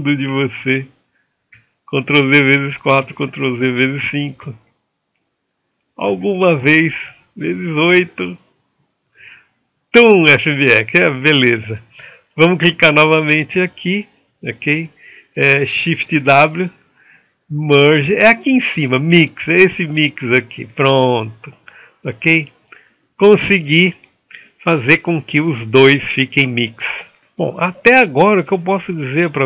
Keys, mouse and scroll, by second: 0.2 ctrl+z, 1.8 ctrl+z, 3.4 ctrl+z, 4.9 ctrl+z, 6.5 ctrl+z, 8.2 ctrl+z, 11.8 click, 18.4 shift+w, 20.2-22.2 middle drag, 22.2-29.4 drag.